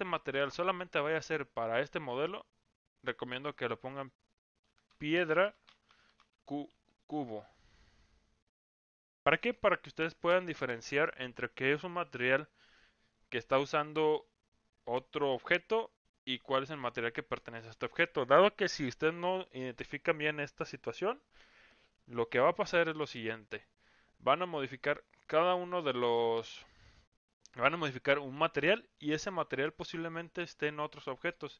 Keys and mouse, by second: 3.6-31.5 drag.